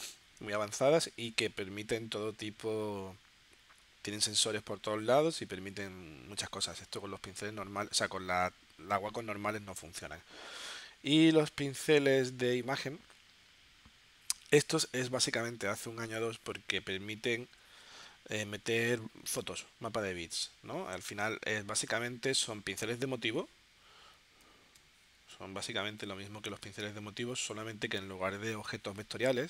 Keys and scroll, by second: 24.7 space, 26.0 space, 26.8 v.